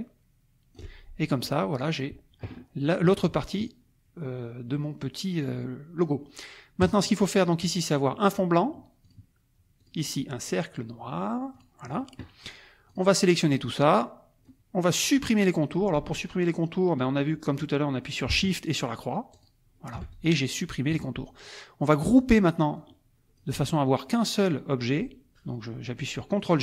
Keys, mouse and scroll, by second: 1.2 ctrl+click, 6.8 click, 7.6 click, 9.0 click, 9.8 click, 11.5 click, 12.9 click, 19.3 shift+click, 20.1 shift+click, 20.9 KP_Subtract, 22.2 click, 22.7 click.